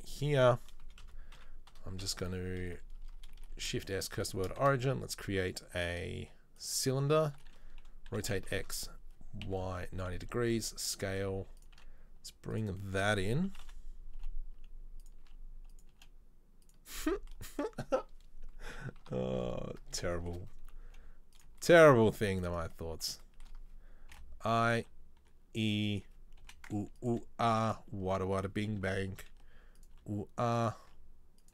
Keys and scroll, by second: 1.0-2.2 typing, 3.7 shift+s, 4.7 shift+a, 7.3 Tab, 8.2 r, 10.5 s, 11.3 g, 11.9 s, 13.5-16.1 typing, 19.2 KP_3, 21.1 g, 24.3 i, 24.9 e, 26.5 i, 27.3 e, 28.9 i, 30.1 e, 31.1 s.